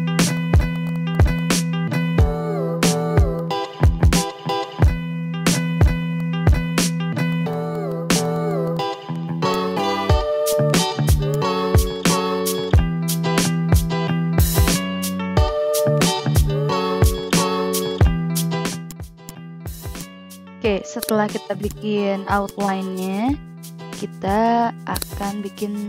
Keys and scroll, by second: 0.1 a, 4.2 ctrl+z, 4.9 ctrl+z, 5.7 ctrl+z, 6.1 a, 7.9 ctrl+z, 8.8 ctrl+z, 8.9 v, 15.5 a, 24.1 ctrl+a.